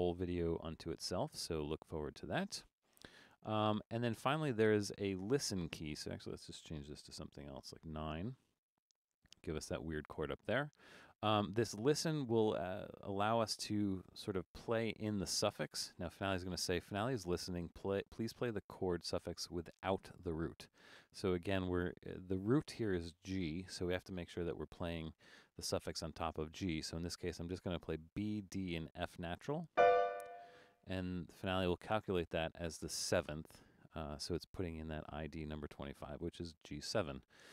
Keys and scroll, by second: 7.6 9.